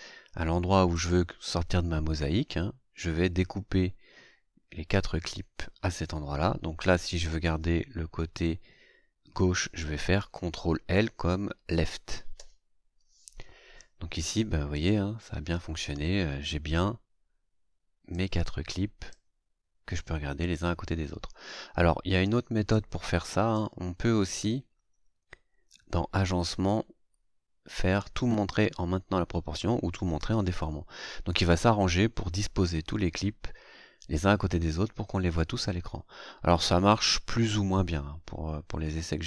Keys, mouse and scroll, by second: 0.9 click, 3.8 scroll down 2, 4.1-4.6 scroll up 2, 4.6-5.0 scroll up 1, 12.3 ctrl+l, 14.7 click, 18.1 click, 22.7 click, 24.2 right click.